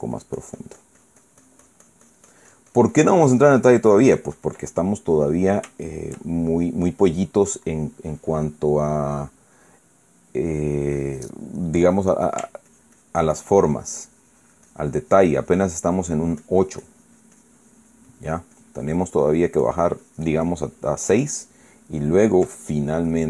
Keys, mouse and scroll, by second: 5.5-6.0 ctrl+middle drag, 13.4-22.2 ctrl+drag.